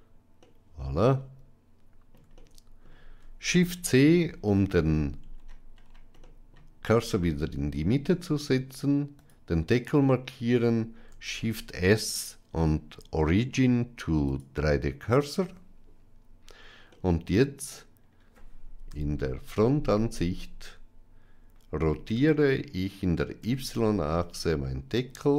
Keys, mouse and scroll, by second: 0.3-2.0 middle drag, 2.2-2.7 shift+middle drag, 3.8 shift+c, 6.1 middle click, 9.1 click, 11.0 shift+s, 16.8-17.5 middle drag, 18.7 KP_1, 22.0 r.